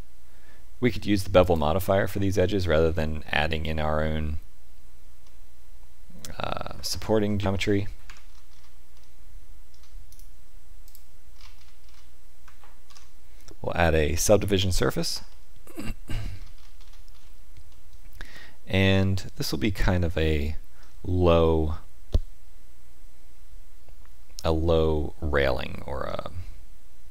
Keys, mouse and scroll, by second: 2.5 middle click, 5.2 middle click, 7.5-8.0 scroll down 4, 8.0 Tab, 8.3-8.9 scroll down 4, 8.9 middle click, 10.1 right click, 11.3 scroll up 2, 12.4-12.8 scroll up 7, 12.8 ctrl+2, 15.3 middle click, 16.3-17.7 scroll down 11, 17.7 middle click, 21.3 middle click.